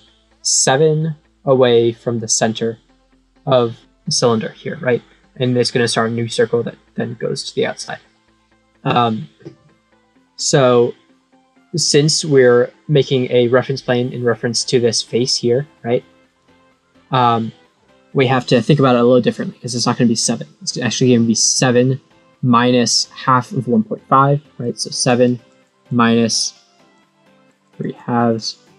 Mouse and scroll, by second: 15.2-16.3 drag, 24.6 click, 25.2 click, 25.6 click, 26.9 click, 27.6 click, 27.9 click.